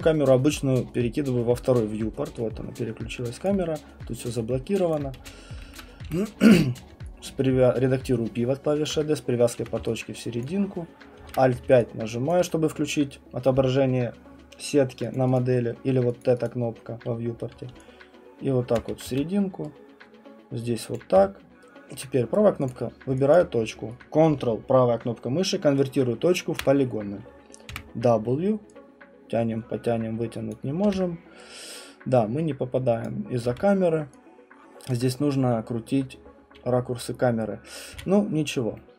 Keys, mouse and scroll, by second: 1.5 middle click, 3.4 alt+click, 4.9 click, 5.2-8.0 typing, 8.8 click, 9.4-10.1 typing, 10.4 alt+click, 11.2 alt+5, 12.3 alt+click, 15.1 click, 15.4 click, 16.3 click, 16.4 click, 17.7-19.0 typing, 18.8 click, 20.9 click, 21.2 q, 22.3 right click, 22.7 click, 23.3 alt+click, 26.6 ctrl+right click, 27.7 w, 30.5 click, 30.8 r, 33.0 click, 33.5 w, 34.9 click, 37.9 q.